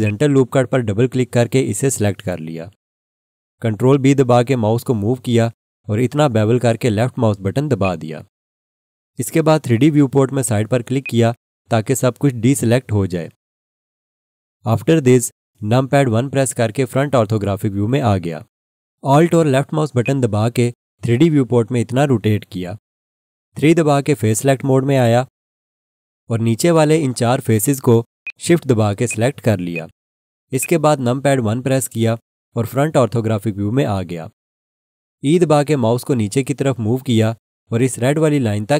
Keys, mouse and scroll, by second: 0.0 double click, 4.3 ctrl+b, 7.8 click, 11.0 click, 16.1 1, 20.0 alt+click, 23.9 3, 28.2 shift+click, 29.0 shift+click, 29.7 shift+click, 30.6 shift+click, 31.8 KP_1, 35.6 e.